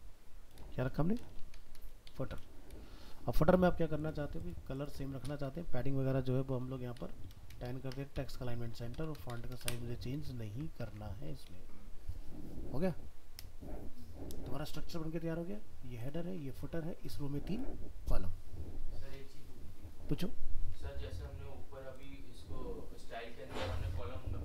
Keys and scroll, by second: 10.3 ctrl+s, 10.9 alt+Tab.